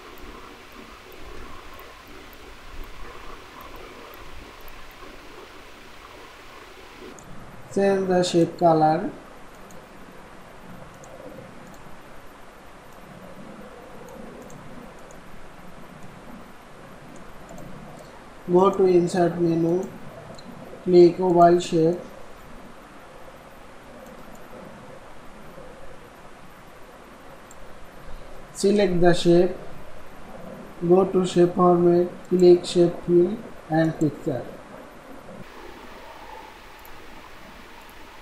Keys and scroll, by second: 1.3 ctrl+z.